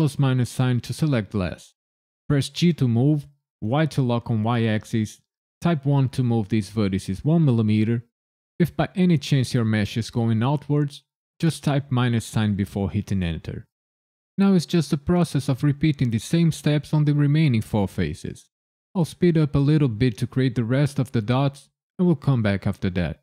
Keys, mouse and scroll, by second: 2.5 g, 3.7 y, 5.8 KP_1, 11.8 KP_Subtract, 13.1 KP_Enter, 14.3 KP_7, 15.1 click, 15.4 shift+click, 15.7 shift+click, 16.0 ctrl+KP_Add, 16.4 i, 16.5 KP_Decimal, 16.6 KP_5, 16.8 KP_Enter, 17.8 click, 18.1 shift+click, 18.4 ctrl+KP_Add, 18.7 i, 18.8 KP_Decimal, 18.9 KP_5, 19.1 KP_Enter, 19.5 click, 20.1 shift+click, 20.4 shift+click, 20.6 shift+click, 21.0 shift+click, 21.3 ctrl+KP_Add, 21.7 right click, 22.9 i, 23.0 KP_Decimal, 23.1 KP_6.